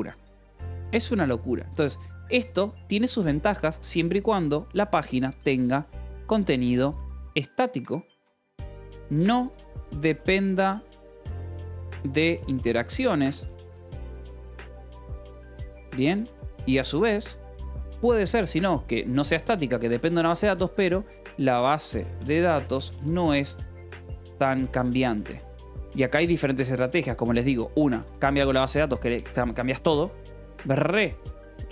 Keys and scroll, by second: 1.9 Escape, 2.5 o, 2.9 Return, 3.5 =, 3.7 space, 5.2-17.6 typing, 20.9-25.8 typing, 27.6 ctrl+s, 28.5 shift+v, 28.7 Escape.